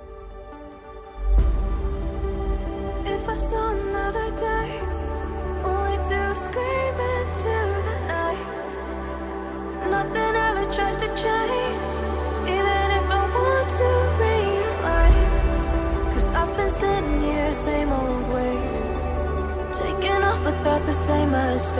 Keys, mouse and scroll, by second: 4.2 right click, 4.9 right click, 11.8 ctrl+click, 17.1 right click.